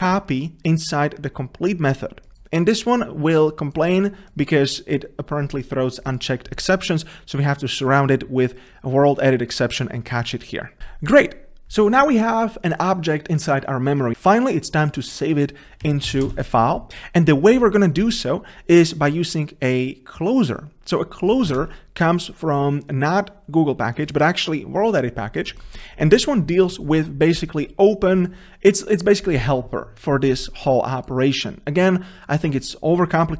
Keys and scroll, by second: 16.4 ctrl+v, 21.7 ctrl+space.